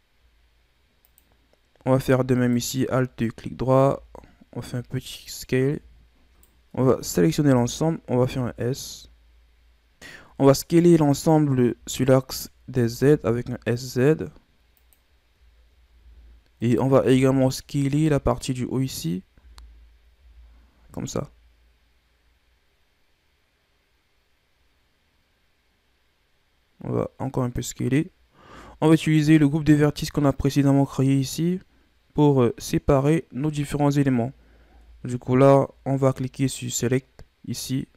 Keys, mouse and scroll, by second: 2.3 alt+right click, 3.7 s, 5.6 Tab, 6.0-6.3 scroll down 1, 6.3 KP_1, 6.3 right click, 6.7 Tab, 7.1 a, 7.4 a, 8.1 s, 11.0 Tab, 11.7 a, 12.8 s, 15.3-15.9 shift+scroll up 3, 15.9 z, 16.6 right click, 17.0 b, 19.4 z, 20.1 s, 28.2 scroll up 1, 28.5 Tab, 30.8 Tab, 33.4 a, 34.6 Tab, 35.1 Tab.